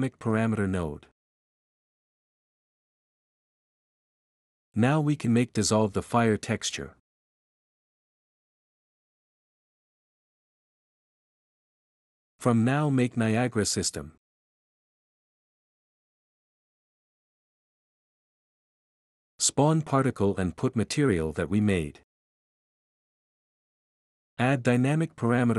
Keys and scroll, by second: 3.4-4.3 typing, 6.2-11.3 typing, 15.9-17.1 typing, 17.1 ctrl+s, 25.4-25.5 typing.